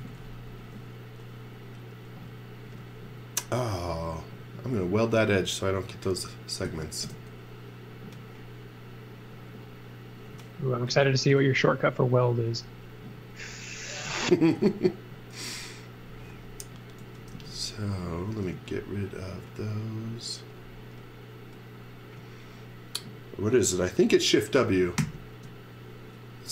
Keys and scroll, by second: 0.0-0.9 typing, 6.6 super+z, 7.0 space, 10.9 super+z, 14.6 super+z, 17.0 x, 17.3 v, 18.3 space, 25.0 shift+w.